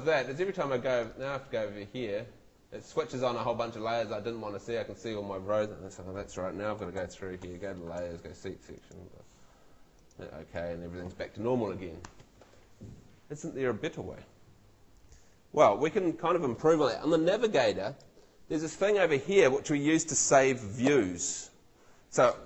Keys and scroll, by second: 7.0 super+l.